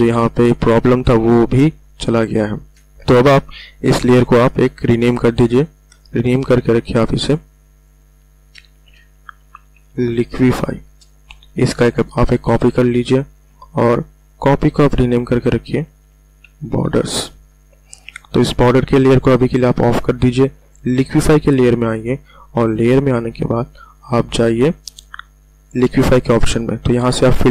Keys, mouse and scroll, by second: 1.5 ctrl+alt+scroll down 1, 2.2 space, 2.4 click, 2.7-3.2 ctrl+alt+scroll down 1, 5.2 click, 8.4-9.8 typing, 10.9 Return, 12.4 ctrl+j, 14.2 click, 15.3-15.7 typing, 16.8 Return, 19.7 click, 26.1 click.